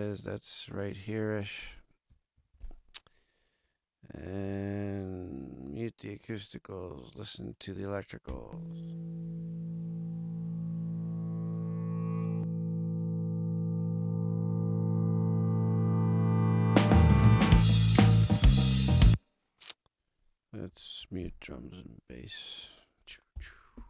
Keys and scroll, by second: 2.3 super+=, 8.2 space, 18.8 space, 21.0 super+=, 23.3 ctrl+alt+super+Up.